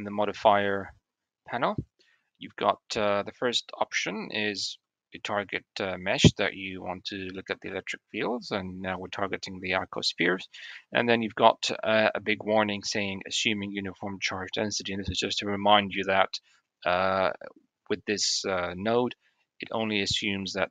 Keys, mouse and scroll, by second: 0.6 middle click, 1.1 middle click.